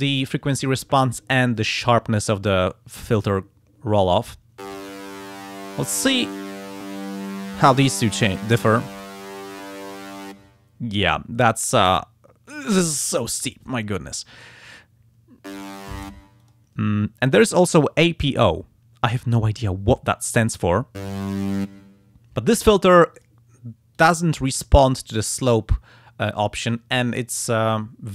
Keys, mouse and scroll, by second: 5.1 click, 6.8 click, 8.1 click, 9.6 click, 16.4 click, 19.1 click, 23.2 click, 23.9 click, 26.7-28.1 drag.